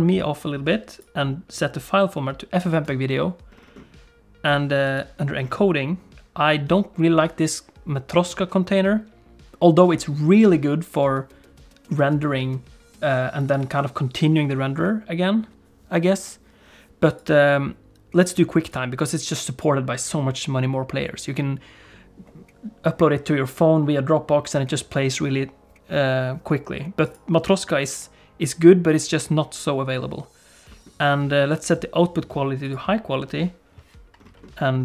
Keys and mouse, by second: 0.9-2.9 drag, 4.9 click, 17.3-18.8 drag, 27.1-29.9 drag, 31.6-32.8 drag.